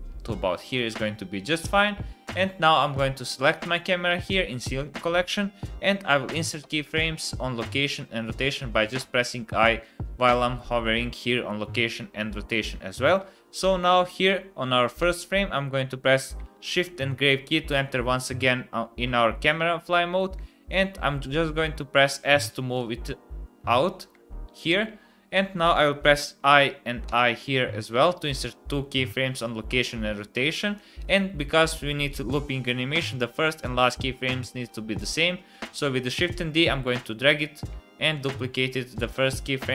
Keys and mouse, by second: 2.2 click, 6.6 i, 9.0 i, 13.8 click, 16.5 shift+`, 26.2 i, 27.0 i, 30.7-31.1 drag, 35.7 shift+d.